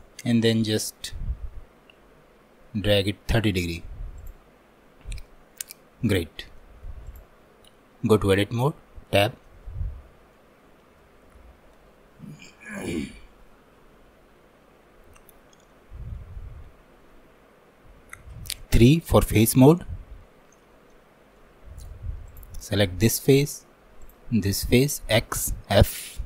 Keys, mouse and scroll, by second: 0.5-3.5 ctrl+drag, 4.2 click, 4.8-5.3 scroll up 2, 5.3-7.1 shift+middle drag, 7.1-10.1 drag, 10.1 scroll down 2, 10.4-22.3 middle drag, 22.3 click, 22.8-24.1 middle drag, 24.1 shift+click, 24.5 middle click, 25.2 x.